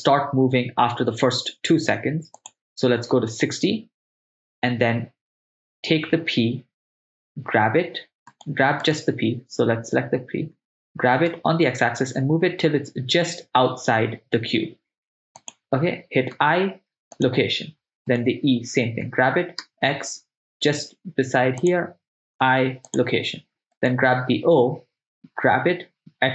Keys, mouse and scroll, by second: 2.6 drag, 7.4 g, 8.3-10.5 right drag, 10.6 g, 11.3 x, 15.5 click, 16.4 i, 18.1 right click, 19.1 g, 19.6 x, 21.6 click, 22.4 i, 23.9 click, 23.9 right click, 25.6 g, 26.0 x.